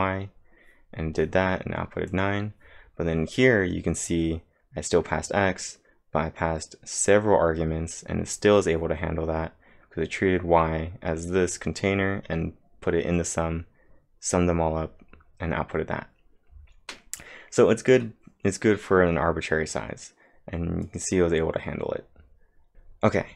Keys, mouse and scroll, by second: 2.1 click, 3.9 click, 4.0-4.7 typing, 20.8 click.